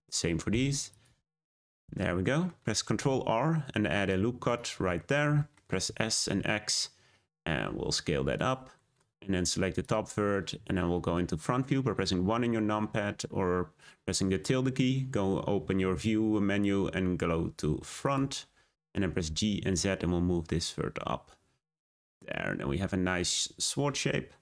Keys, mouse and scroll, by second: 0.4 m, 1.3 click, 1.7 scroll down 1, 1.9 middle click, 2.9 r, 4.9 shift+middle click, 5.8 s, 8.7-9.8 middle drag, 9.8 click, 19.2 g, 23.3-24.2 scroll down 1, 24.2 scroll down 1.